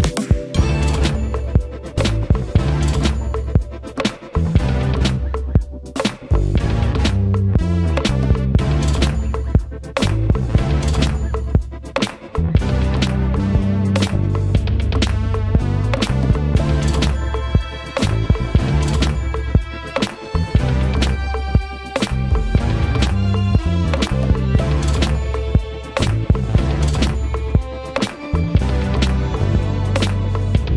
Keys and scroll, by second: 10.4 space, 13.6 shift+v, 20.1 space, 26.1 Escape, 26.6 space.